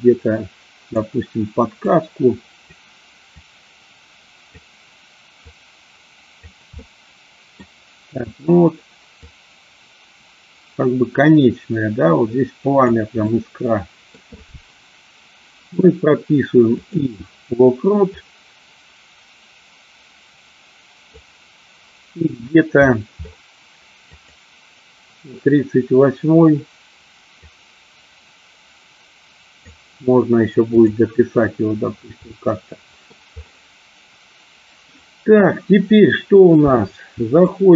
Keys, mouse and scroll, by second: 1.9 click, 3.4-4.8 drag, 5.5 click, 6.9 middle click, 9.3-13.0 drag, 13.4 middle click, 16.9 click, 18.3 click, 24.2 click, 27.5-29.8 drag, 32.4 middle click, 37.4 click.